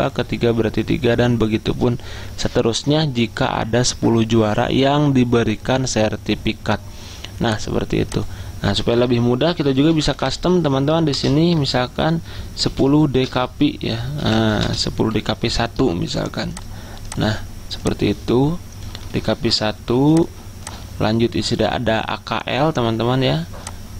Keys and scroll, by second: 9.8-11.0 typing, 11.7 Return, 12.8-15.7 typing.